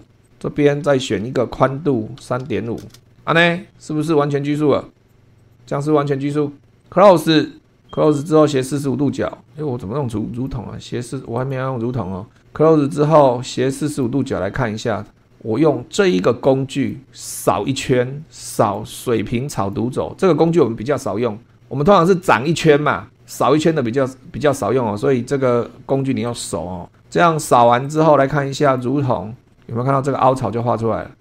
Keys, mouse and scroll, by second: 0.0 super+2, 0.2 click, 1.7-3.0 typing, 4.5 click, 5.4 click, 6.8 click, 8.0 click, 8.5 click, 10.3 click, 11.3 click, 13.9 click, 16.7 click, 18.5 click, 19.5 click, 26.2 click, 27.9 click, 28.7 click, 29.3 scroll up 2, 29.5-30.8 middle drag.